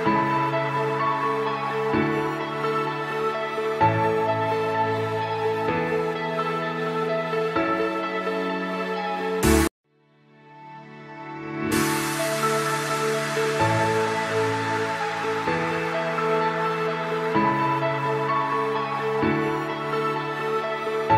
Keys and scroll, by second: 3.7 Delete, 4.6 ctrl+z, 9.6 F2, 17.7 Escape, 17.9 F2, 19.2 F6.